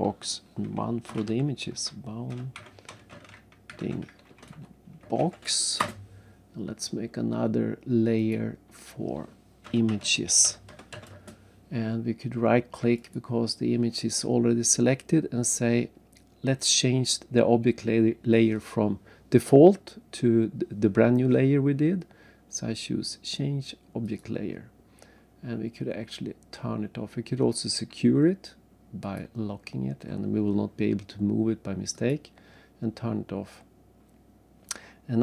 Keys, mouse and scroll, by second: 1.1-5.8 typing, 5.8 Return, 8.2 click, 9.7-10.9 typing, 11.1 Return, 12.9 right click, 24.0 click, 29.0 click, 31.9 click, 33.3-34.1 scroll down 3, 34.1-34.7 scroll up 1, 34.8 scroll down 1.